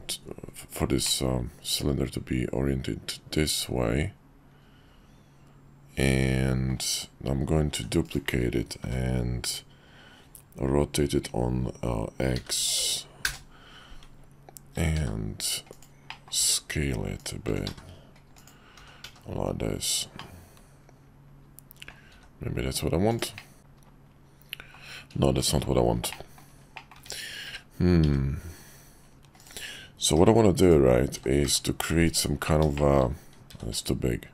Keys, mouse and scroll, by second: 1.2-6.7 drag, 7.7 shift+d, 8.8 r, 14.7 s, 16.2 click, 16.4 s, 17.4 s, 18.7 g, 20.3-21.9 middle drag, 22.1 s, 23.5-24.7 middle drag, 25.3 x, 26.1-26.4 middle drag, 26.7 middle click, 26.9 `, 27.4 `, 28.0 `, 30.1 g, 31.1 s, 32.9 shift+middle click, 33.5 s.